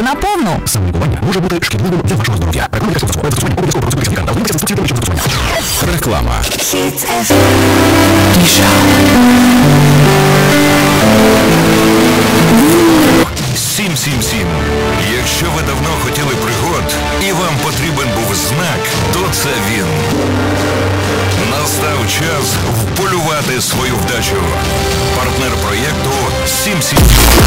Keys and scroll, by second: 13.9 Page_Down.